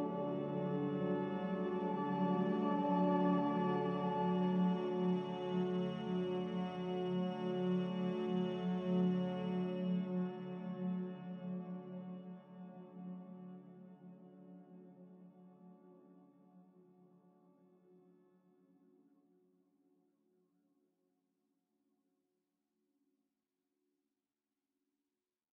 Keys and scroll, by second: 11.5 s.